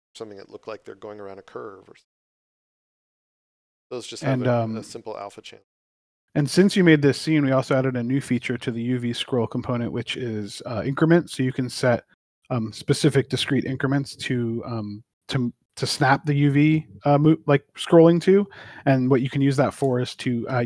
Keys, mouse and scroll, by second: 2.5 click, 6.0 d, 8.6-11.2 typing.